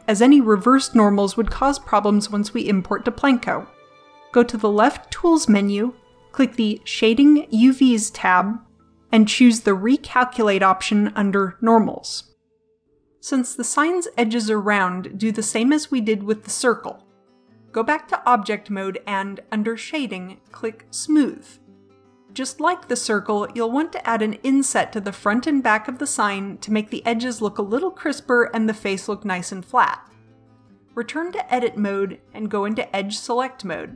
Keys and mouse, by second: 16.4-17.9 middle drag, 17.9 Tab, 18.8-20.7 middle drag, 24.7-26.2 middle drag, 30.9 Tab, 33.4-33.9 middle drag.